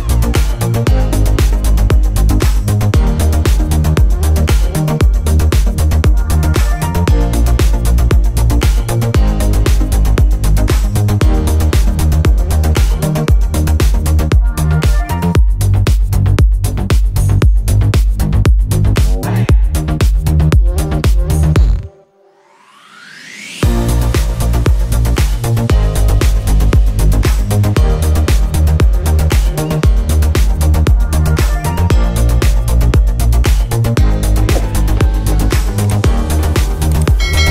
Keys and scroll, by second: 2.5 Return, 6.4 ctrl+shift+n, 7.6 Return, 11.5 Return, 12.5 b, 13.8 ], 14.0 [, 14.3 ], 15.1 [, 29.6 Return.